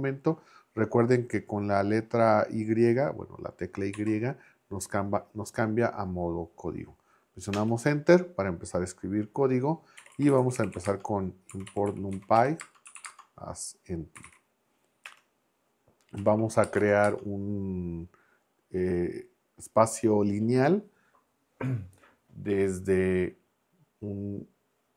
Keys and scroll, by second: 4.0 y, 7.6 Return, 9.7-14.7 typing, 15.0 Return, 16.2 x, 16.6 space, 16.8 =, 17.1 space.